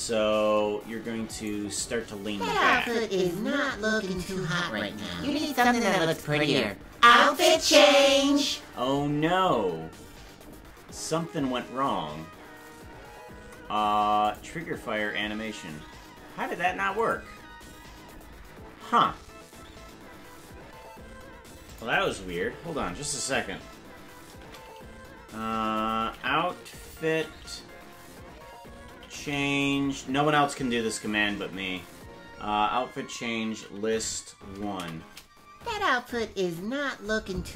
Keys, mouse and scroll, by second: 1.5 right click, 2.8 right click.